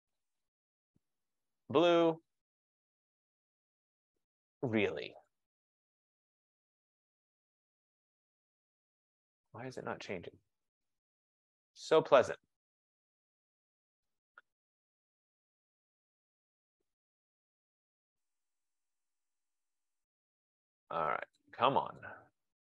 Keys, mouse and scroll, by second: 0.2 click, 0.5 click, 1.7 click, 2.5 click, 3.3 click, 4.7 F15, 5.4 click, 6.0 click, 6.2 click, 7.7 click, 8.4 click, 9.9 click, 12.3 click, 14.1 click, 16.4 click, 19.2 click, 20.0 click, 21.4 click, 22.1 click.